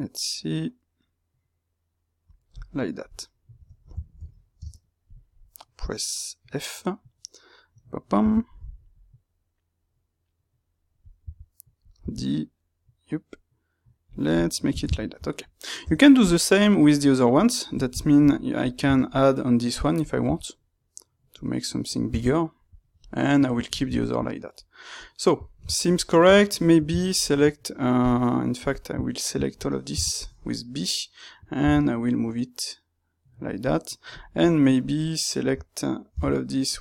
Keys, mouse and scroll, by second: 2.5-3.6 middle drag, 3.6 Tab, 4.0-5.1 ctrl+middle drag, 5.1 space, 14.3-16.1 middle drag, 16.1 click, 16.4-26.9 middle drag, 26.9-27.9 ctrl+right drag, 27.9 click, 29.8 b, 33.4 click, 34.1 click, 34.7-36.0 ctrl+right drag, 36.0 b.